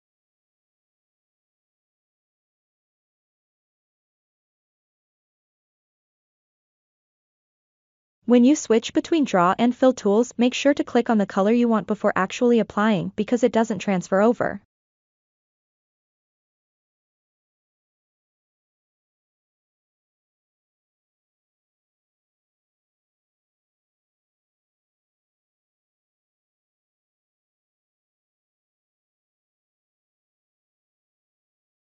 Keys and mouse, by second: 1.7 click, 3.2 click, 4.9 click, 10.7-11.9 drag, 13.3 click, 16.4 drag, 20.3 click, 21.8 click, 23.2 middle click, 23.9-24.9 ctrl+middle drag, 25.9 KP_1, 27.9 f, 30.4 f.